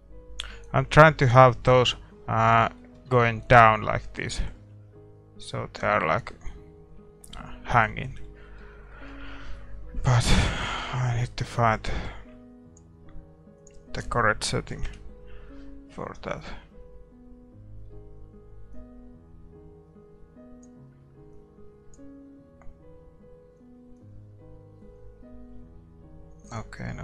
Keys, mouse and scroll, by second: 0.9-9.5 middle drag, 12.3-26.2 drag.